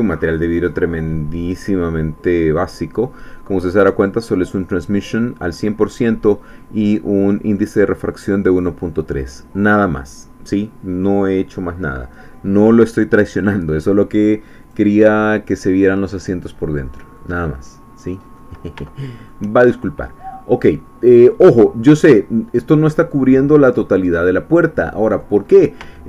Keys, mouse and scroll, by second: 14.6 click, 15.6-17.3 middle drag, 17.5-18.2 scroll up 2, 18.8 shift+middle click, 20.4 scroll down 1, 21.5 click, 22.2-25.4 middle drag, 25.5-25.8 scroll up 1, 25.9 shift+middle click.